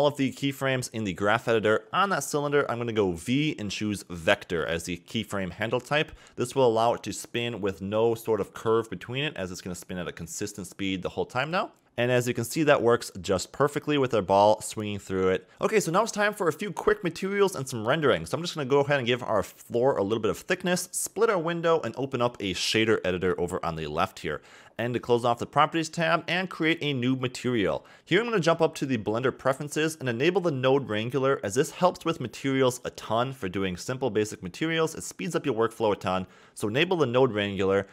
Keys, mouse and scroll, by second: 1.2-2.0 scroll down 15, 2.4 click, 3.5-4.5 scroll down 24, 4.5 a, 4.7 a, 5.1 a, 5.3-6.1 middle drag, 6.1-7.1 scroll down 5, 7.3 v, 9.2 a, 9.3 a, 10.6 click, 11.0 scroll up 1, 11.2 a, 11.3 a, 11.7-13.7 drag, 14.3 scroll up 3, 14.5 scroll down 1, 14.5 middle click, 15.0 Right, 15.2 Right, 15.2 middle click, 15.5-15.9 Right, 16.7 click, 17.8 scroll down 2, 17.9-18.6 middle drag, 18.6 click, 19.4 Tab, 20.1 e, 21.3 a, 21.3 Tab, 21.7-22.4 middle drag, 22.4 scroll down 1, 22.5 middle click, 22.6-26.6 drag, 26.6 n, 27.6 click, 28.3-28.7 scroll up 3, 28.7 middle click, 29.0-30.3 scroll up 2, 30.3-31.3 drag.